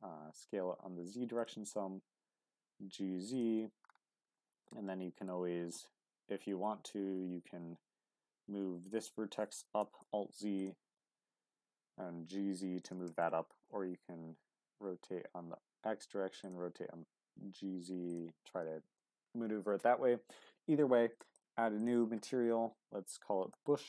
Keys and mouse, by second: 0.1 s, 0.3 z, 1.4 click, 1.5 g, 1.6 z, 3.3 click, 4.2 q, 4.6 middle click, 6.5 Tab, 7.1 Tab, 8.8 click, 9.8 alt+z, 10.9 g, 11.1 z, 12.8 click, 13.1 Tab, 13.6 r, 13.9 x, 16.4 click, 17.4 z, 18.6 middle click, 21.3-23.8 drag.